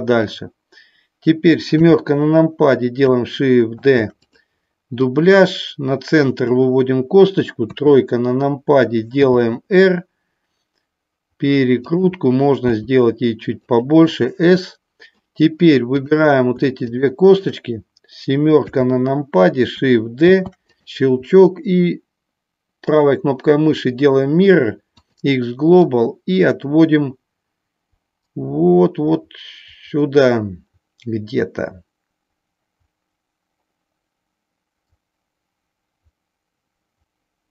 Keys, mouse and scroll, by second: 1.7 KP_7, 3.7 shift+d, 4.9-6.3 drag, 7.6 KP_3, 9.2 r, 11.9 click, 13.7 click, 16.0 click, 16.7 shift+click, 18.6 KP_7, 20.3 shift+d, 26.0-37.5 drag.